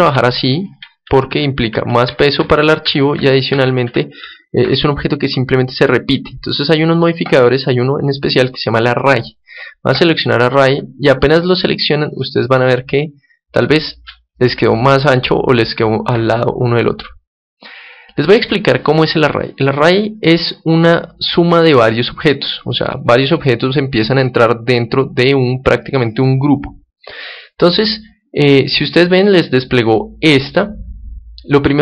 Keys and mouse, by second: 0.0 Escape, 1.0 ctrl+z, 1.2 ctrl+z, 1.8 ctrl+z, 2.0 ctrl+z, 2.3 ctrl+z, 2.8 ctrl+z, 3.1 ctrl+z, 3.5 ctrl+z, 3.8 ctrl+z, 7.2-9.2 drag, 11.0-16.4 middle drag.